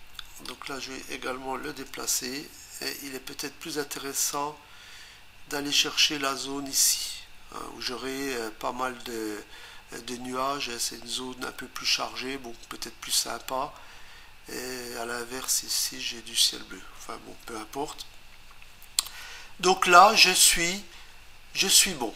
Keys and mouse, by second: 0.5 click, 1.9 Return, 4.3 click.